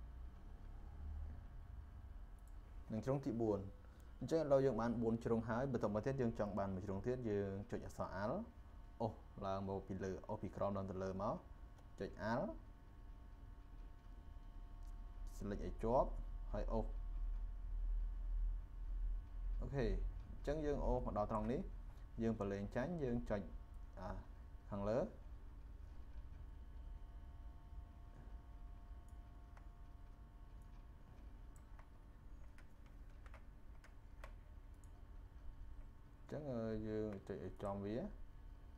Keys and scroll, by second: 33.0 ctrl+z, 33.8 ctrl+z.